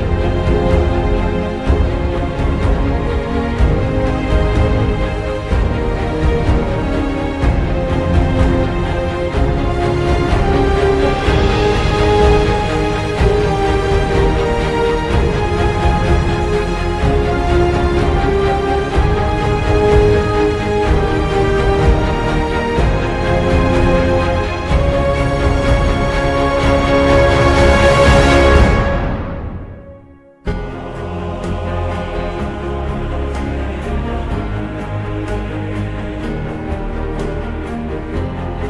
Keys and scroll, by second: 6.6 Up, 7.0 F2, 7.5 ctrl+Home, 8.0 Right, 8.8-10.4 typing, 10.8 ctrl+End, 11.8-20.1 typing, 16.2 Down, 16.3 Tab, 25.8 Left, 26.2 Up, 27.2-30.1 typing.